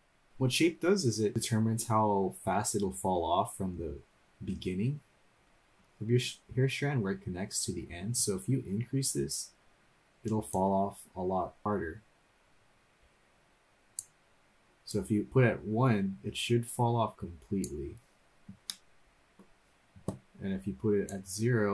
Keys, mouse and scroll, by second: 5.5-6.4 scroll up 4, 10.5-14.1 drag, 14.9-17.6 drag, 18.7 middle click, 21.1-21.7 drag.